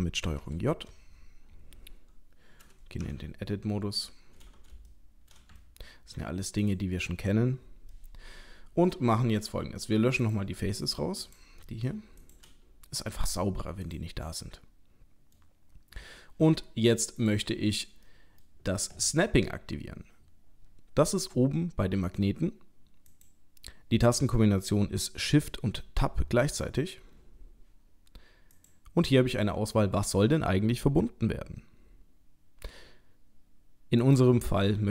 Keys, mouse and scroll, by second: 0.4 ctrl+j, 3.0 Tab, 3.8 scroll up 2, 4.9 shift+middle click, 5.6 ctrl+middle click, 6.6 click, 7.9 middle click, 10.2 click, 10.8 click, 11.3 click, 11.6 middle click, 11.9 middle click, 12.2 shift+click, 13.1 Delete, 14.3 middle click, 17.2 click, 18.1 middle click, 23.1 click, 28.6 click, 34.0 click.